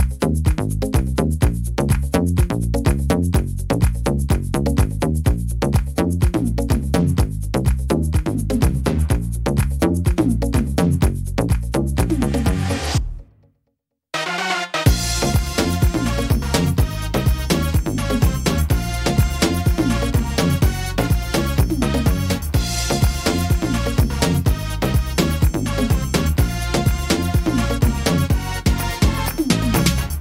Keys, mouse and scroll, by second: 0.4 scroll up 2, 0.7 middle click, 1.3 middle click, 2.7 right click, 3.3 shift+right click, 4.0 right click, 4.3 shift+right click, 4.8 shift+right click, 5.8 click, 10.8 middle click, 11.3-12.1 scroll down 5, 12.0 middle click, 12.5-12.9 scroll up 2, 12.9 middle click, 13.4 middle click, 15.4 middle click, 18.6 middle click, 18.6-19.0 scroll up 2, 19.0 middle click, 19.7 right click, 20.2 shift+right click, 20.9 right click, 21.5 right click, 21.9 shift+right click, 22.3 right click, 22.6 shift+right click, 23.1 shift+right click, 23.5 shift+right click, 23.9 shift+right click, 24.3 middle click, 24.9 scroll down 1, 25.5 shift+right click, 25.8 middle click, 26.7 middle click, 27.5 shift+right click, 27.7 middle click, 29.2 click.